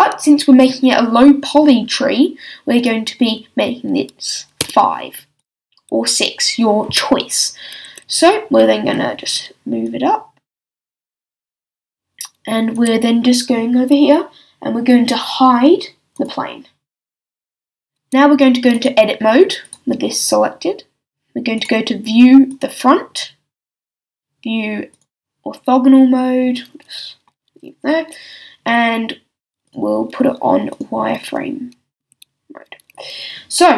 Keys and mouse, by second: 2.7-7.5 drag, 9.8-11.8 drag, 12.7-14.7 middle drag, 16.1-17.1 drag, 17.1 middle click, 17.7-18.7 middle drag, 21.3 middle click, 26.1-29.6 middle drag, 30.8-32.0 drag, 32.0 a.